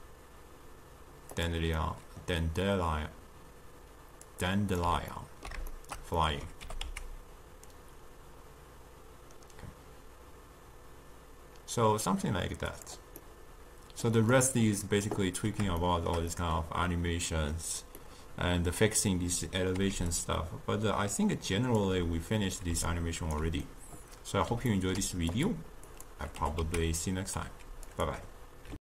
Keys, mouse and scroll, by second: 1.9-4.4 middle drag, 4.4 click, 5.2-6.7 ctrl+middle drag, 6.7 g, 13.3-14.5 middle drag, 14.5 click, 15.9-20.0 shift+middle drag, 20.0 d, 20.2-21.9 drag, 21.9 d, 22.8 d, 23.0 right click, 23.5 d, 23.8-25.5 middle drag, 25.5 click, 26.0 click, 26.5 g.